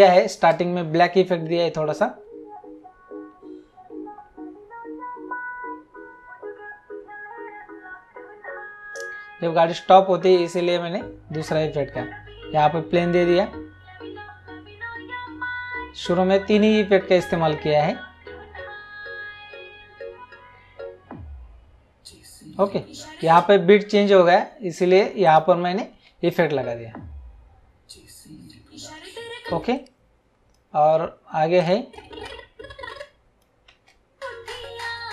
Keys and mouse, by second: 0.3 space, 23.2 space, 25.2 click, 26.0 space, 29.5 space, 29.8 click, 31.6 click, 33.7 space.